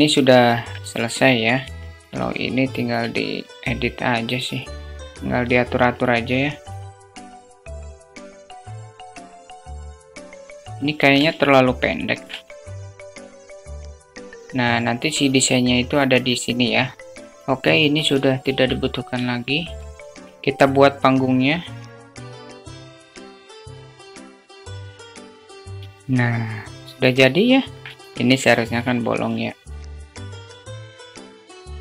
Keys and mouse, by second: 0.5-1.0 middle drag, 1.0 Tab, 2.4 s, 4.4 s, 6.4 s, 7.5 alt+click, 7.7 alt+shift+click, 8.1 click, 8.5 s, 8.9 Tab, 9.1 Tab, 9.3 s, 9.6 Tab, 9.8 alt+shift+click, 10.2-10.6 alt+shift+drag, 10.7 shift+click, 11.1 alt+shift+middle drag, 11.3 alt+shift+middle click, 11.9 Tab, 12.4 alt+z, 12.6 click, 12.9 alt+z, 13.2 click, 13.8 Tab, 14.0 click, 16.9 shift+middle click, 17.8 Delete, 19.3 shift+a, 22.0-23.6 typing, 22.4 middle click, 22.6 middle click, 22.6 Tab, 22.7 middle click, 22.9 ctrl+click, 22.9 ctrl+b, 23.1 ctrl+b, 23.5 Tab, 23.6 click, 23.9 alt+shift+middle click, 24.1 shift+middle click, 24.4 alt+drag, 24.8 click, 25.4 click, 25.5-26.4 alt+middle drag, 26.9 middle click, 28.0 Tab, 29.1-31.8 typing, 29.2 middle click, 29.3 click, 29.8 alt+middle click, 30.0 Tab, 30.0 alt+middle click, 30.4 Tab, 30.6 alt+middle click, 31.1 ctrl+z, 31.2 Tab, 31.2 alt+click, 31.6 Tab.